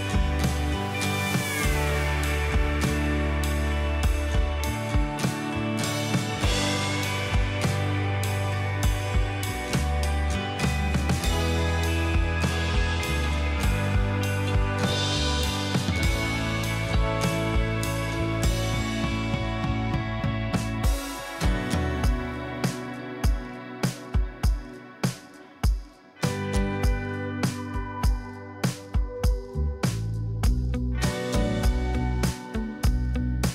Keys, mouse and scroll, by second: 1.4 double click, 3.7 ctrl+click, 9.5 ctrl+i, 25.1-26.8 typing, 28.0 double click.